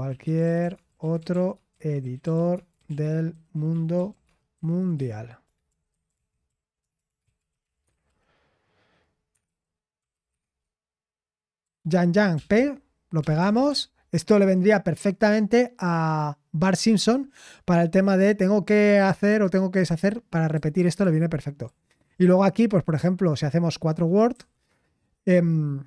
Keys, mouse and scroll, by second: 0.0-13.9 typing, 15.6-16.4 typing.